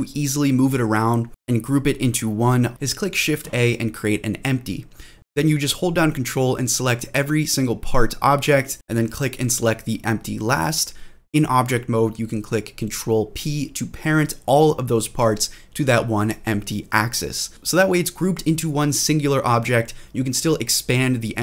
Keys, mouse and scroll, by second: 2.7 middle click, 2.7 scroll down 2, 2.9 shift+a, 5.6 click, 5.8 click, 5.9 scroll up 1, 5.9 BackSpace, 6.4 click, 7.4 ctrl+click, 7.6 ctrl+click, 8.0 ctrl+click, 8.3 ctrl+click, 10.9 ctrl+click, 10.9 scroll up 1, 11.1 ctrl+p, 13.2 click, 13.5-13.8 scroll down 2, 14.1 shift+middle drag, 14.5 g, 14.8 click, 15.1-15.5 middle drag, 15.6 g, 16.2 click, 16.5 middle click, 17.1 g, 17.6 click, 17.9-18.3 scroll up 2, 18.3-18.9 middle drag, 19.1-19.6 scroll up 2, 19.7-20.1 shift+middle drag.